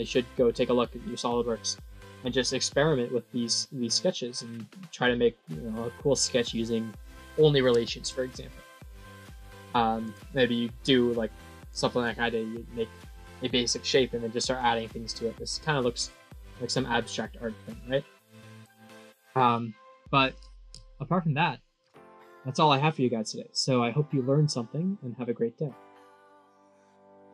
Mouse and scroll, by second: 6.0 click, 7.0 middle click, 8.8 middle click, 16.4-18.3 middle drag.